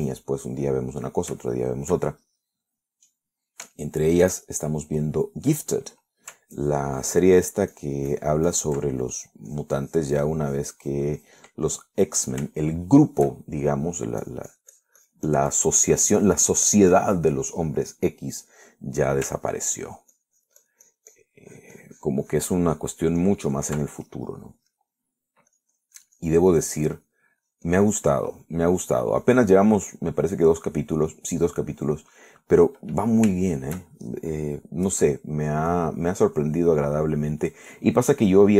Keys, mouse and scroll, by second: 1.6 shift+middle click, 2.7 shift+middle click, 5.0-6.3 shift+middle drag, 6.8 middle click, 7.8 ctrl+click, 8.2 ctrl+click, 9.0 ctrl+click, 9.7 ctrl+click, 10.4 ctrl+click, 12.8-14.5 ctrl+middle drag, 15.5-18.6 drag, 20.6 ctrl+click, 21.1-22.6 ctrl+drag, 24.3 ctrl+click, 25.0 ctrl+click, 26.8 click, 27.8 click, 28.7 click, 29.6 click, 30.4 click, 30.9 click, 31.6 click, 32.3 click, 32.9 click, 33.3 click, 33.8 middle click, 34.6 shift+middle click, 36.9-38.0 drag, 38.2 click.